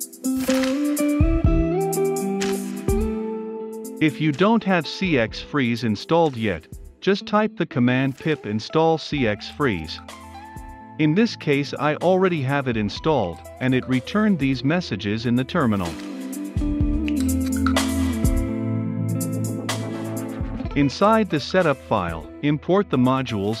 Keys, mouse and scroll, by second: 1.7-2.6 typing, 2.9 Return, 3.9-6.9 typing, 7.9 Return, 12.8-20.4 drag, 20.4-23.6 typing, 20.9 Return, 21.7 Return, 22.0 Return, 22.6 Return, 23.2 Return.